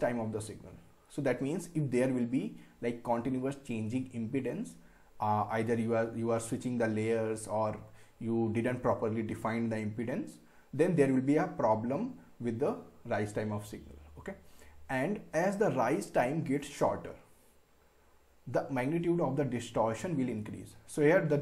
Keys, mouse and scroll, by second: 20.9 scroll down 1.